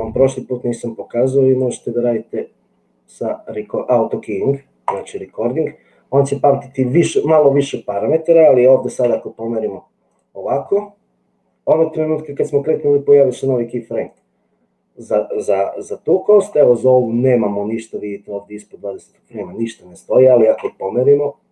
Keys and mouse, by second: 0.0-1.8 drag, 9.1 g, 20.6 g.